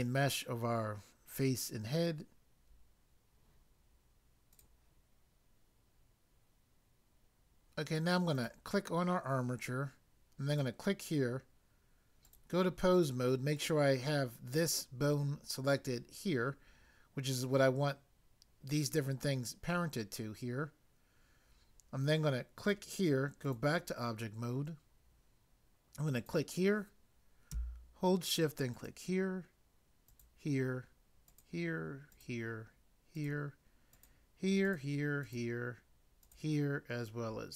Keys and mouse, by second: 4.6 click, 4.6 click, 8.4 click, 10.5 click, 12.3 click, 13.5 click, 22.6 click, 23.5 click, 26.2 click, 28.7 shift+click, 30.1 shift+click, 31.3 shift+click, 32.1 shift+click, 33.1 shift+click, 34.0 shift+click, 34.7 shift+click, 35.2 shift+click, 36.2 shift+click.